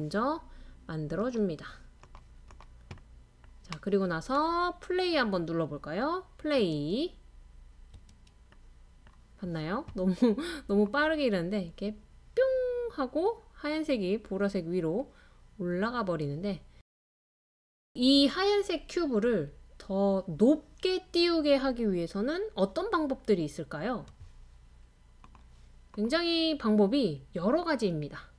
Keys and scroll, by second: 5.7 space, 5.8 space, 7.0 space, 7.1 space.